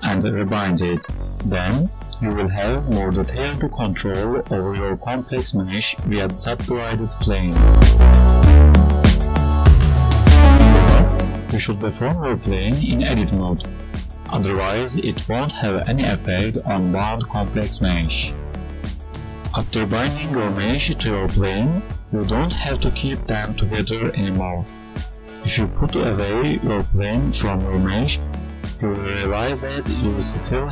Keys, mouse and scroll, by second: 2.0 click, 2.2 right click, 3.1 g, 4.0 click, 4.2 g, 6.3 Tab, 6.5 right click, 7.1 Tab, 8.0 Tab, 8.3 right click, 9.2 g, 10.4 Delete, 11.1 Page_Up, 11.1 click, 11.5 click, 11.7 click, 12.8 right click, 12.9 click, 13.8 g, 14.5 right click, 14.7 g, 15.4 s, 16.1 Tab, 16.2 right click, 17.4 g, 18.3 a, 18.7 s, 20.1 right click, 20.7 s, 21.7 Tab, 22.2 g, 22.3 right click, 22.8 Tab, 23.1 click, 23.6 g, 26.1 right click, 26.5 click, 26.7 right click, 27.1 g, 28.6 Tab, 29.3-30.0 ctrl+z, 30.4 right click, 30.6 Tab.